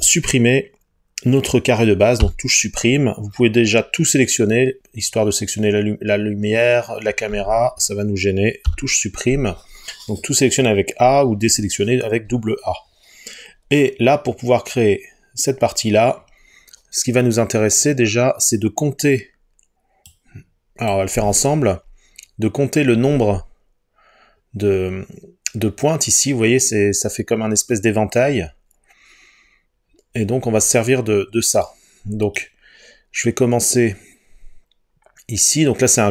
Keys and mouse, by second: 2.3 Delete, 8.7 Delete.